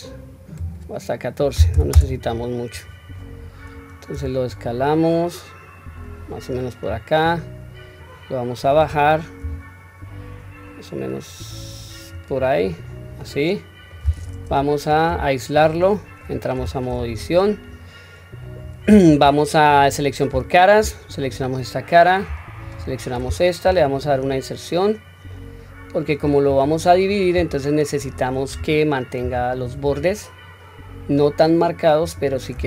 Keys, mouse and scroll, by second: 0.6-2.0 drag, 3.4-4.1 scroll down 2, 4.1 s, 6.8 scroll up 1, 8.0-8.7 drag, 8.0-8.7 scroll up 2, 9.4 s, 12.6-13.2 scroll up 1, 13.2-13.9 middle drag, 13.2 scroll up 2, 14.5 /, 15.0-15.7 scroll down 2, 15.5-16.2 middle drag, 16.6 Tab, 17.3 scroll down 1, 20.3 3, 20.8 click, 21.6-22.2 middle drag, 22.6 shift+click, 23.6 i, 26.5-27.1 middle drag, 27.9 middle click, 29.2 ctrl+r.